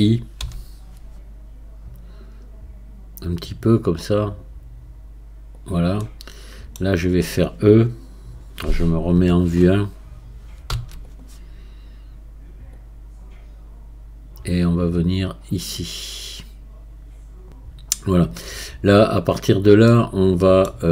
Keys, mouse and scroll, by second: 6.0-9.1 middle drag, 9.1 KP_1, 10.7 e, 12.7-19.9 drag, 19.9-20.9 middle drag.